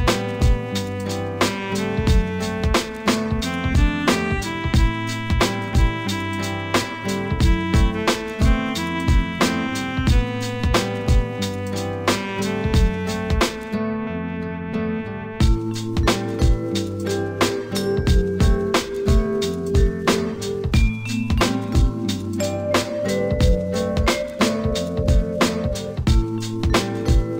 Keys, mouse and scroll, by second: 2.4 s, 4.1 g, 9.2-12.3 drag, 16.0-19.0 drag, 21.2-27.0 drag.